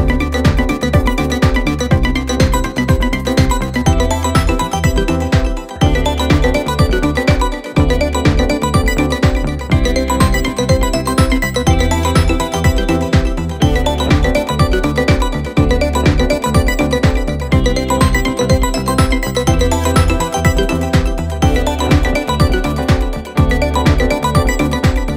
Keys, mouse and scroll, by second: 0.1-2.2 scroll up 1, 2.2 click, 6.2 click, 7.3 shift+a, 10.0 s, 15.5 click, 19.0 click, 19.7 click, 24.1 click.